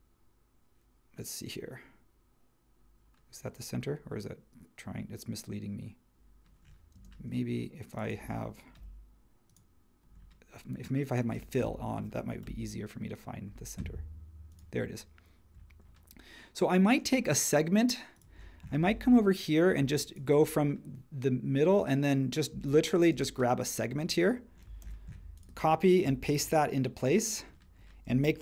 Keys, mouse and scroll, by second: 6.9 space, 8.8 l, 11.3 space, 12.4 l, 19.7 Escape, 22.5 space, 23.1 space, 24.8 super+c, 26.3 shift+v.